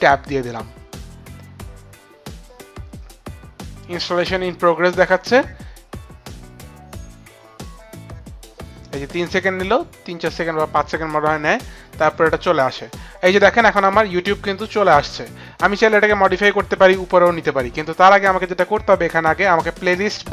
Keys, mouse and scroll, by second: 0.3 click.